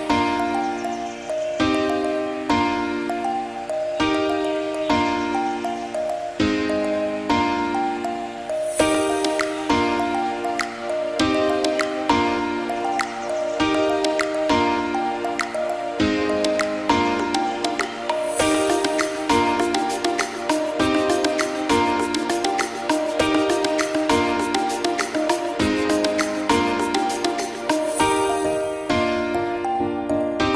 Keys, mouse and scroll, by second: 1.0 g, 1.8 click, 2.5 middle click, 2.8 g, 3.4-4.1 middle drag, 4.3 click, 4.9 g, 6.0-6.8 middle drag, 6.9 click, 7.1-8.1 drag, 8.5 click, 9.1 click, 9.5-10.0 middle drag, 10.0 click, 10.3-11.6 middle drag, 11.6 click, 11.8 s, 12.3 shift+a, 13.5 ctrl+alt+KP_0, 14.0 click, 14.7 n, 15.1 click, 15.3 click, 15.4 n, 15.7 click, 16.4 KP_Decimal, 16.9-19.3 ctrl+middle drag, 19.5 drag, 19.7 click, 20.0 click, 20.3 click, 21.4 click, 22.6-26.1 ctrl+middle drag, 26.1 click, 26.6 click, 27.9 click, 28.3 KP_0, 29.2 click, 30.0 click.